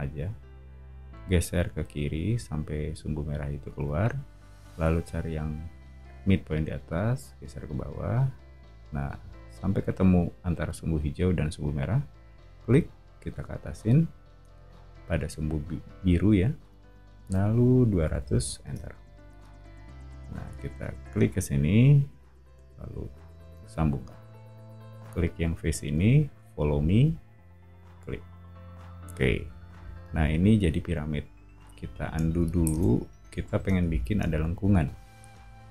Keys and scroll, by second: 17.6-18.7 typing, 23.4 space, 29.4 o, 32.7 super+z.